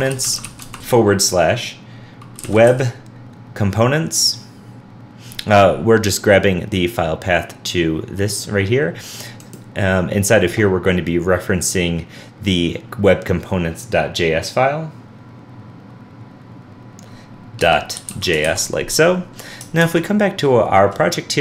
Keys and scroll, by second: 18.4 super+s, 19.8 super+s, 20.0 super+Tab.